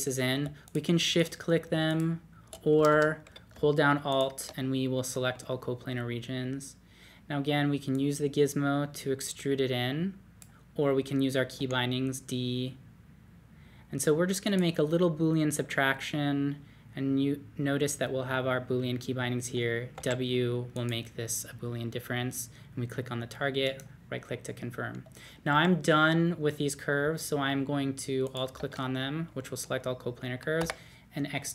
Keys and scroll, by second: 2.8 Escape, 2.9 Escape, 11.5 d, 19.9 w, 22.7-23.4 typing, 25.5 typing, 30.6 x.